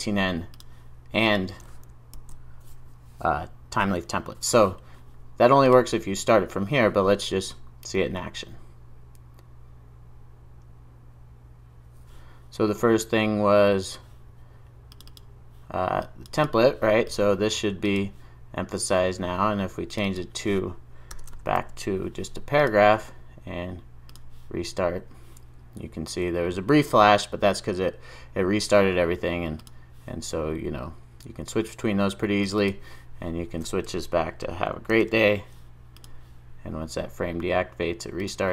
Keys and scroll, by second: 5.7 ctrl+r, 21.6 super+s, 33.9 super+z, 36.0 super+s.